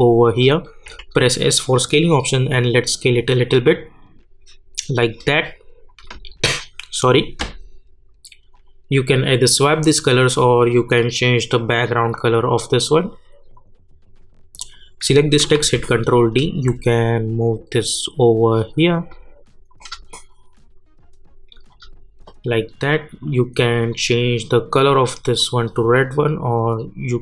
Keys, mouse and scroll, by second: 0.8 s, 2.0-9.3 drag, 15.5 ctrl+d, 16.2-27.2 drag.